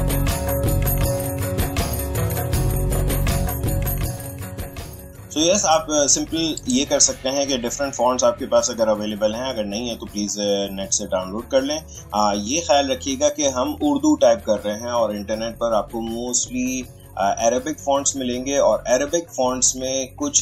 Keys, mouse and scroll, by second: 0.0-2.8 typing, 4.0 ctrl+a, 4.0 click, 5.1 ctrl+z, 6.6 click.